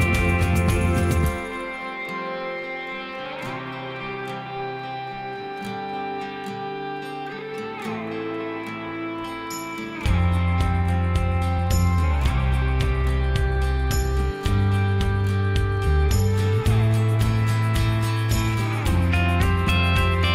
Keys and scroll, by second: 1.7 Escape, 1.7 Escape, 1.9 Escape, 4.9 Escape, 5.0 Escape, 5.1 Escape, 7.6 Escape, 7.9 ctrl+z, 8.1 ctrl+z, 8.3 ctrl+z, 14.1 Escape, 19.7 Escape.